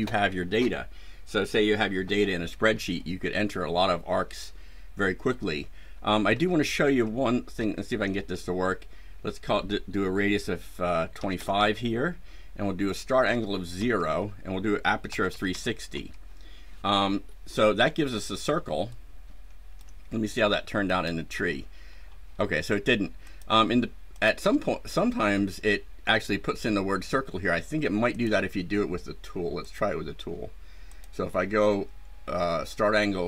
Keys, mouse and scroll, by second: 6.2 KP_Enter, 7.5 KP_Enter, 11.1 KP_2, 11.2 KP_5, 11.5 KP_Enter, 13.2 KP_0, 13.7 Return, 15.0 KP_3, 15.2 KP_6, 15.4 KP_0, 15.8 KP_Enter, 17.7 scroll down 2, 18.3 scroll down 2, 18.8-19.9 ctrl+right drag, 20.8 click, 21.8 scroll down 2, 23.2 click, 24.1 click, 28.0 click, 29.6 click, 30.8 click.